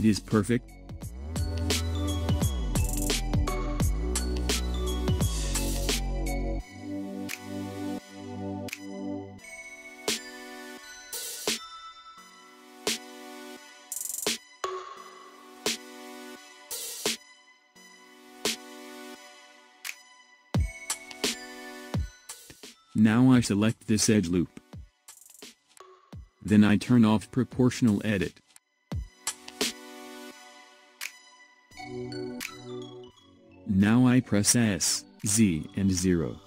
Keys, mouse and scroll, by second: 0.1-0.9 scroll down 1, 0.9-1.6 scroll down 1, 1.6-2.2 scroll down 1, 2.2-4.3 middle drag, 4.3-4.9 scroll down 3, 4.9-7.9 middle drag, 12.4-15.4 middle drag, 15.6-16.5 scroll up 1, 16.5 shift+middle click, 17.2-18.1 scroll up 5, 18.1-18.8 scroll down 1, 18.8 shift+middle click, 19.5-20.0 scroll up 1, 20.0-23.0 middle drag, 23.9 click, 28.0 click, 33.0 click, 33.5 click, 35.7 s.